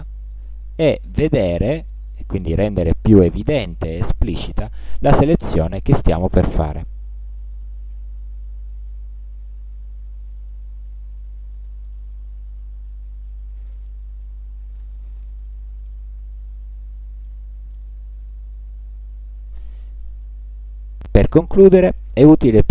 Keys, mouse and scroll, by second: 0.6-1.2 alt+scroll up 2, 1.5 alt+scroll up 2, 2.6 alt+scroll down 2, 3.7 alt+scroll up 2, 4.6 alt+scroll down 2, 5.4 alt+scroll down 2, 6.2-6.9 alt+scroll up 4, 7.4 alt+scroll down 2, 15.5 click, 16.4 ctrl+scroll down 2, 17.3 ctrl+middle click, 17.6 ctrl+click, 18.1 ctrl+scroll down 2, 18.8 ctrl+scroll up 2.